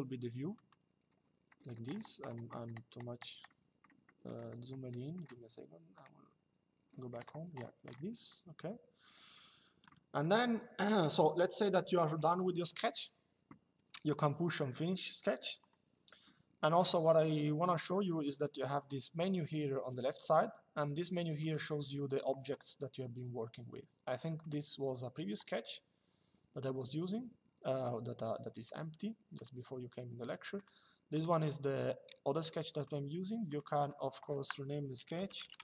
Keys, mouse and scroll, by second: 0.3 click, 1.2 middle click, 3.2 middle click, 8.0 shift+middle click, 11.1 shift+middle click, 15.3 click, 21.1 click, 24.1 click, 28.3 click, 30.3 click, 32.0 click, 34.8-35.6 typing.